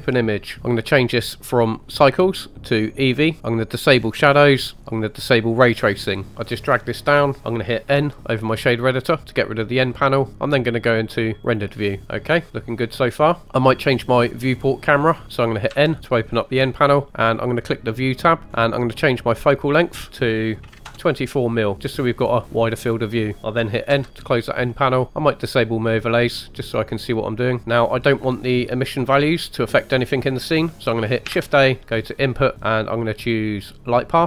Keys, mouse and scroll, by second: 0.6-1.8 scroll down 2, 1.9-2.9 drag, 3.9-5.3 drag, 6.7 click, 7.4 t, 7.9 n, 12.0-12.9 middle drag, 14.4-14.9 scroll up 2, 14.9-15.2 scroll down 2, 15.2 n, 15.6 n, 17.8 click, 18.5-20.1 scroll up 2, 20.1-21.6 drag, 23.9 n, 24.7 middle click, 25.8 click, 26.3 middle click, 31.3 shift+a.